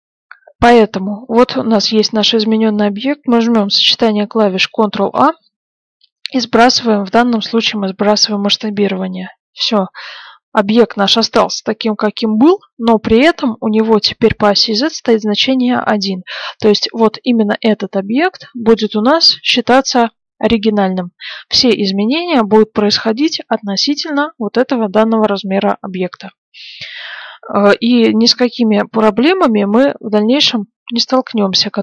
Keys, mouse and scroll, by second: 5.0 ctrl+a, 16.8-19.3 middle drag, 21.0-23.9 middle drag, 26.1-27.9 middle drag, 29.1-31.2 middle drag.